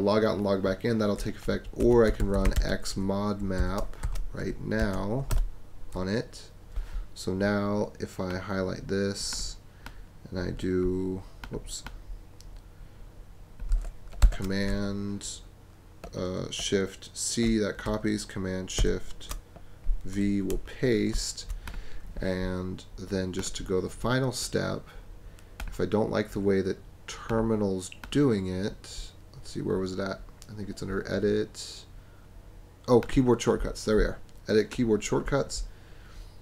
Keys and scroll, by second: 1.5-4.9 typing, 5.3 Return, 14.2 shift+super+c, 18.8 shift+super+v, 20.5 BackSpace.